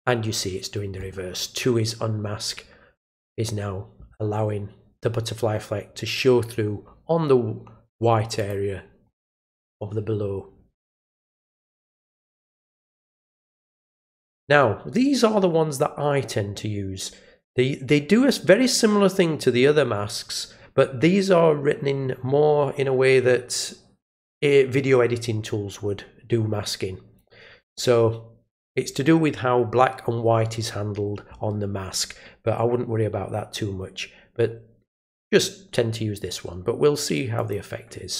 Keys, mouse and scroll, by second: 8.4 click, 9.3 click, 12.6 click, 13.5 click, 37.3 click.